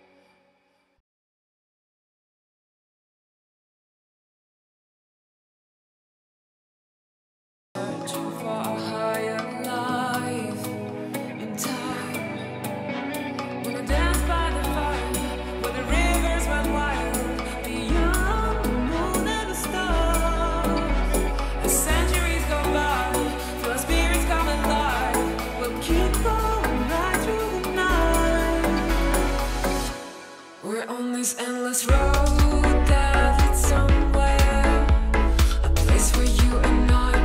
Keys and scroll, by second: 2.3 [, 4.4 super+z, 6.4 super+z, 8.5 super+z, 10.8 space, 12.1 ], 14.5 [, 18.6 space, 19.0 v, 19.2 super+z, 19.4 space, 20.6 shift+w, 30.4 space, 32.0 space, 37.0 c.